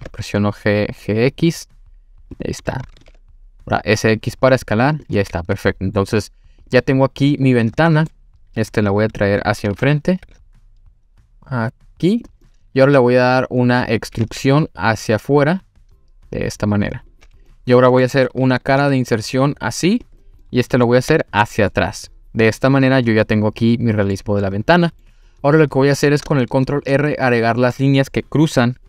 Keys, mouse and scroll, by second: 2.3 click, 3.0 s, 3.0 x, 5.0 click, 5.2 middle click, 6.6 click, 7.2-7.6 scroll down 1, 7.6-8.1 middle drag, 9.7 g, 12.1 click, 12.4-13.3 middle drag, 13.5-14.1 scroll up 2, 14.2 e, 17.1 click, 17.5-18.0 middle drag, 18.8 i, 20.0 click, 20.4 middle click, 21.1 e, 23.0 click, 23.2-24.2 middle drag, 24.4-25.0 middle drag, 25.5-26.0 scroll up 2, 26.3-26.9 shift+middle drag.